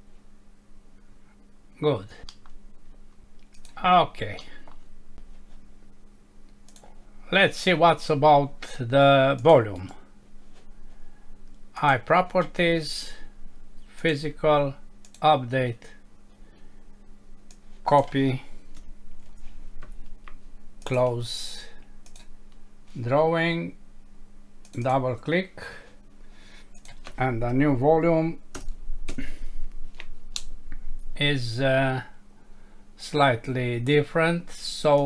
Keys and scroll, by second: 2.3 Home, 4.4 F6, 19.2 ctrl+c, 28.6 Return, 29.1 ctrl+v.